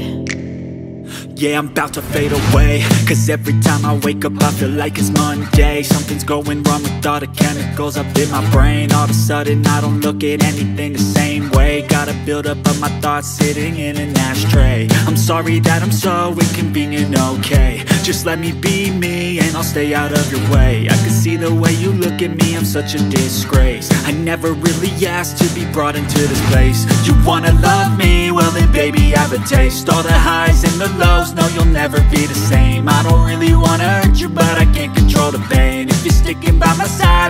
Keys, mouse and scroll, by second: 1.2 click, 1.5-2.6 typing, 3.4 click, 5.6 typing, 6.0-7.7 alt+shift+drag, 7.4-9.0 typing, 10.3 click, 12.6 ctrl+a, 16.5 click, 20.6 v, 24.7 v, 24.7 click, 26.5 v, 27.4 click, 29.2 click, 30.9 Tab, 32.8-33.4 typing, 33.4 Tab, 33.4 click, 36.2 Tab.